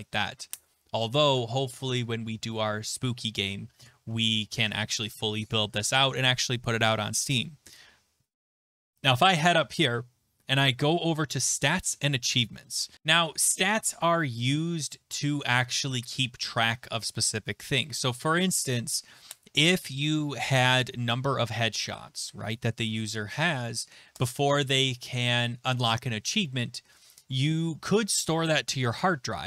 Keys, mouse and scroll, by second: 8.9-12.9 scroll, 13.1 click.